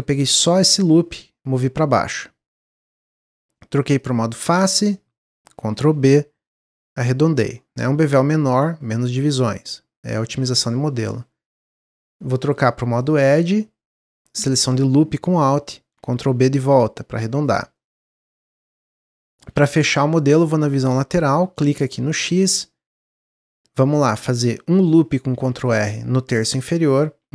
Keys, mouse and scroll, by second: 1.2 click, 4.0 click, 4.7 click, 5.8 ctrl+b, 8.5-11.7 drag, 13.0 click, 14.3 alt+click, 16.2 ctrl+b, 17.7-19.5 middle drag, 19.5 KP_1, 20.1 KP_3, 22.8-23.2 scroll up 2, 25.2 ctrl+r, 27.2 ctrl+r.